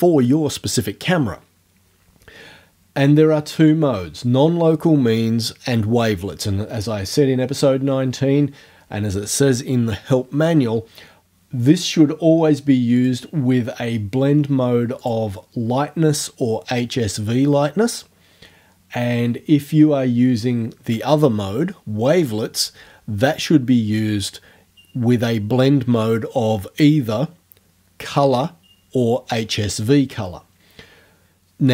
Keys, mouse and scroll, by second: 13.0 click, 15.0 click.